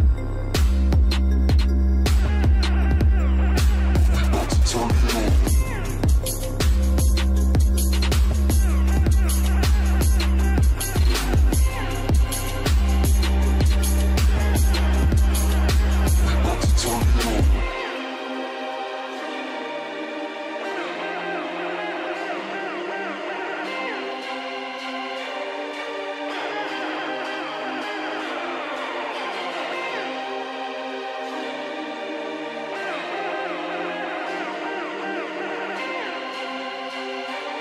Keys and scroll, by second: 14.9 ctrl+space, 16.3 ctrl+space, 27.6 ctrl+space, 28.6 ctrl+space, 32.4 ctrl+shift+space, 35.5 ctrl+shift+space, 36.7 ctrl+shift+space.